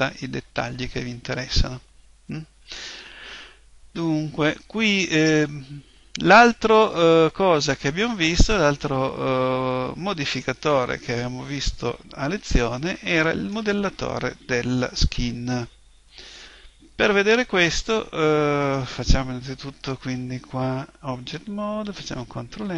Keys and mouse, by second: 21.9 ctrl+n.